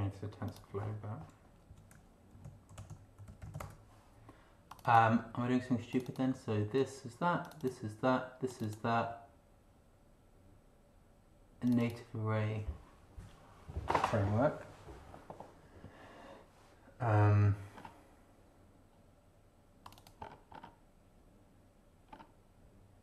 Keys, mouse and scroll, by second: 0.5 click, 1.7 Right, 1.9-4.0 typing, 4.7 click, 5.9 click, 7.5 click, 8.5 click, 11.6 click, 14.1 scroll down 2, 17.7 scroll down 2, 19.8 click, 20.2 scroll down 2.